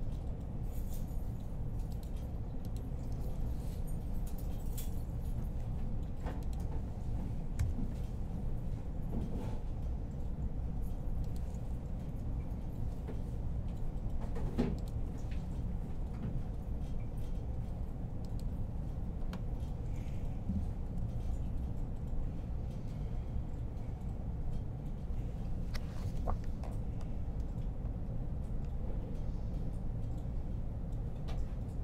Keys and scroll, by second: 3.4 ctrl+r, 5.2 alt+r, 7.4 g, 11.7 r, 14.8 g, 20.7 1.